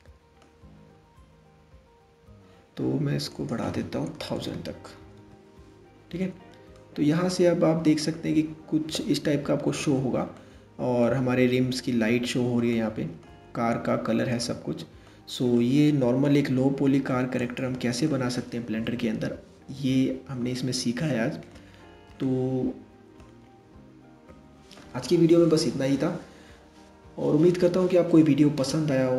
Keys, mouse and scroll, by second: 1.5-2.9 scroll up 1, 2.9-4.1 drag, 4.1 KP_0, 6.3-9.3 middle drag, 9.9-17.2 middle drag, 17.2 click, 17.7-20.6 middle drag, 21.8-23.1 middle drag, 23.1-23.4 scroll down 2, 23.8-26.0 scroll up 2.